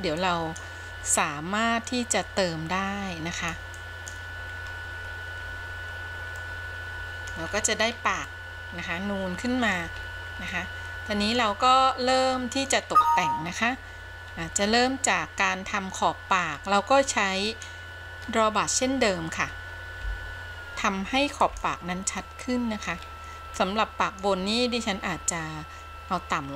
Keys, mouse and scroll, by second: 0.4-0.9 drag, 1.4-3.9 drag, 4.0 click, 4.7-5.3 scroll down 3, 5.7-6.6 scroll down 5, 6.6-7.6 middle drag, 7.6-8.5 scroll up 5, 8.5-10.0 middle drag, 10.2-10.7 scroll up 1, 10.7 middle click, 11.8-12.4 scroll down 2, 12.4 middle click, 13.0-13.7 scroll up 2, 14.6-15.0 scroll up 1, 15.0-16.2 middle drag, 16.7-17.6 scroll down 1, 17.6 click, 20.1 f, 21.6 f, 22.3 middle click, 23.2-23.7 scroll up 1, 23.7 middle click.